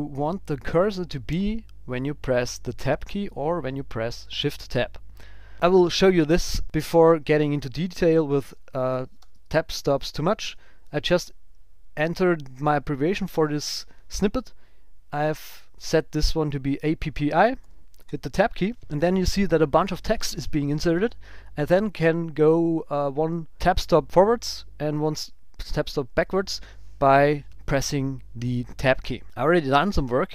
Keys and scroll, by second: 7.1 super+w, 8.1 Down, 8.9 super+Right, 9.2 Return, 13.3 ctrl+alt+super+b, 17.6 super+w, 18.1 Tab, 26.1 shift+Tab, 29.4 super+Down, 29.7 Up.